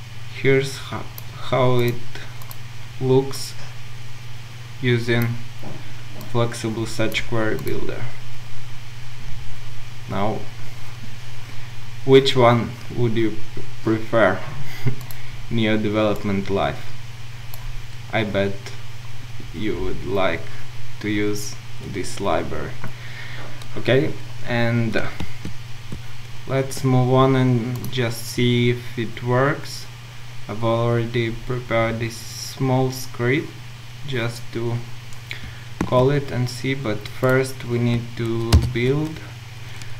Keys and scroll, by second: 38.7 ctrl+shift+super+F9.